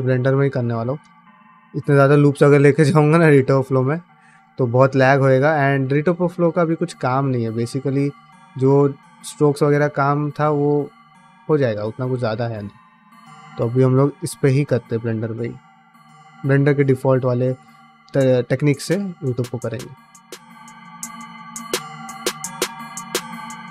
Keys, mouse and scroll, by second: 0.0 n, 0.9 ctrl+alt+space, 1.4 ctrl+middle click, 1.7 ctrl+middle click, 2.0 middle click, 3.4 ctrl+middle click, 3.9 middle click, 4.7 ctrl+shift+middle click, 5.1 ctrl+middle click, 5.4-8.2 middle drag, 9.0-10.6 middle drag, 11.2 middle click, 11.5 middle click, 11.7 middle click, 12.1 ctrl+middle click, 12.5 shift+middle click, 12.7 middle click, 13.3 shift+middle click, 13.6-15.8 middle drag, 16.0 middle click, 16.3 middle click, 16.7 shift+middle click, 17.0 middle click, 17.8 click, 18.2 g, 18.9 middle click, 19.2 middle click, 19.9 middle click, 20.5 click, 21.0 g, 21.9 g, 22.6 click, 22.9 click, 23.2 click, 23.4 g.